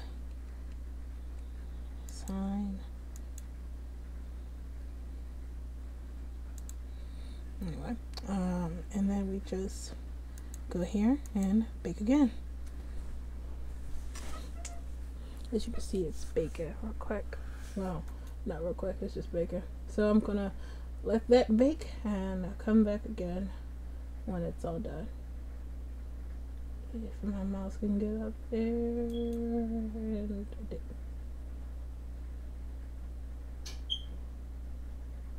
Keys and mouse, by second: 0.2 Tab, 0.6 Tab, 1.4 Tab, 2.2-3.5 drag, 4.4-5.7 drag, 10.6-28.9 drag.